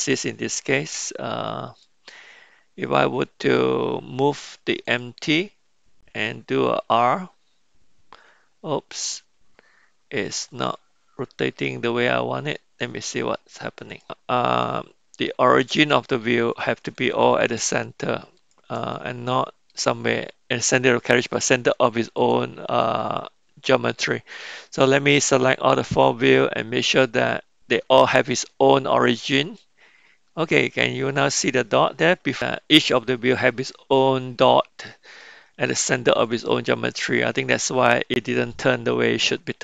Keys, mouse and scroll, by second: 1.7 click, 4.8 click, 6.9 r, 11.2-12.5 middle drag, 14.6-16.2 middle drag, 18.3 shift+click, 19.0-19.7 middle drag, 20.7-21.3 middle drag, 22.2 shift+click, 23.0-24.0 middle drag, 25.9-29.7 drag, 36.2-37.2 middle drag.